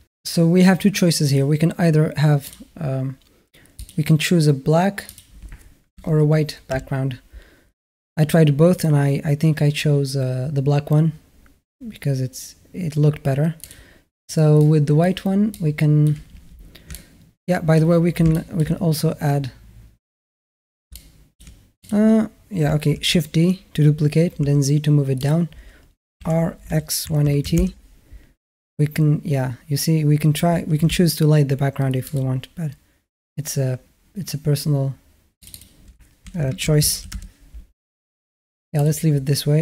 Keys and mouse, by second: 1.1 click, 2.3-6.5 drag, 16.7-17.6 alt+middle drag, 18.1 shift+a, 18.1 shift+middle drag, 18.4 shift+a, 20.7-21.2 alt+middle drag, 21.6 click, 22.8 shift+d, 26.0 r, 30.6 g, 35.3-36.9 drag, 38.6 click.